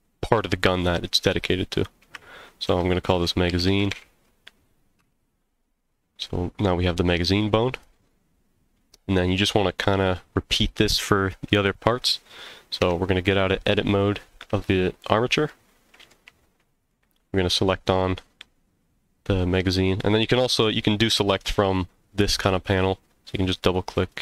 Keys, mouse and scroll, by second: 7.7 click, 8.6 scroll down 1, 9.0 middle click, 9.9-10.2 scroll up 2, 12.8 Tab, 13.6 scroll down 1, 14.3 scroll down 1, 15.5-16.1 middle drag, 16.8 click, 22.5 click, 22.7-23.7 drag, 24.0 click.